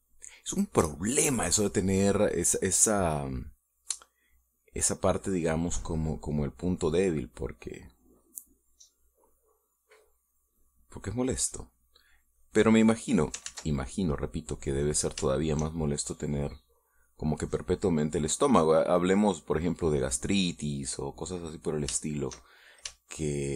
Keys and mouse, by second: 0.6 shift+middle click, 1.1 shift+middle click, 2.1 middle click, 2.6 middle click, 4.4 middle click, 5.6 click, 6.7 middle click, 7.9-9.8 drag, 9.9 middle click, 12.2 click, 12.9 middle click, 13.7 middle click, 14.3 ctrl+z, 15.1 middle click, 16.1 shift+middle click, 17.7 click, 18.7 click, 19.9 click, 20.8 click, 21.7 click, 22.2-23.5 middle drag.